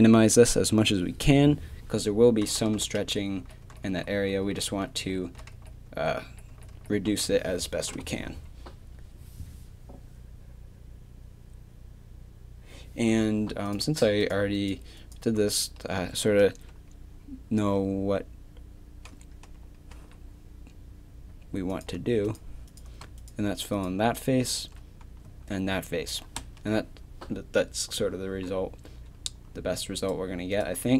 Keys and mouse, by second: 2.7 ctrl+z, 3.0 ctrl+z, 3.4 ctrl+z, 3.6 ctrl+z, 3.9 ctrl+z, 4.2 ctrl+z, 4.4 ctrl+z, 4.7 ctrl+z, 5.0 ctrl+z, 5.3 ctrl+z, 5.5 ctrl+z, 5.9 ctrl+z, 6.2 ctrl+z, 6.5 ctrl+z, 6.7 ctrl+z, 7.1 ctrl+z, 7.4 ctrl+z, 18.6-19.9 middle drag, 19.9 f, 24.6 f, 25.3 a, 30.0-30.9 right drag.